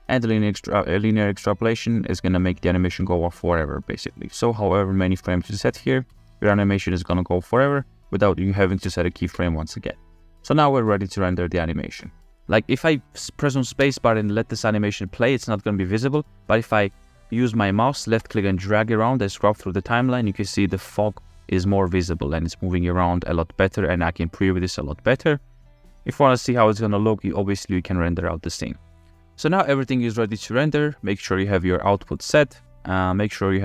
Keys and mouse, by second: 1.2-3.0 drag, 4.3 drag, 6.1 space, 10.0-11.5 drag, 14.0 space, 18.3-29.2 drag, 18.3 space, 29.8 click, 33.2 click.